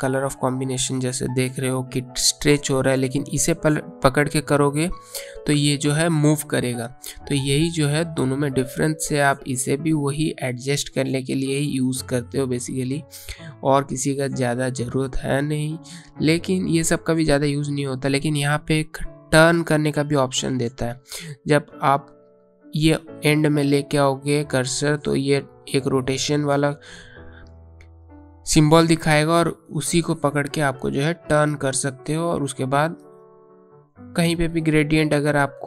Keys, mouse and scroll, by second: 17.9 click, 23.0 click, 28.2 click, 34.4 click.